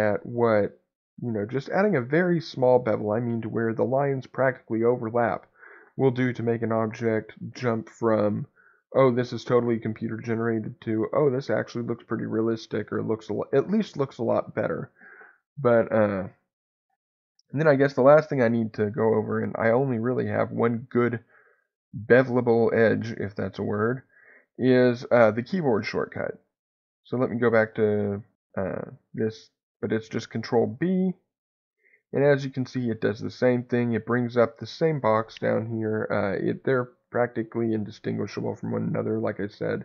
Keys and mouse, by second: 23.7 ctrl+z, 30.6 ctrl+b, 33.0 click.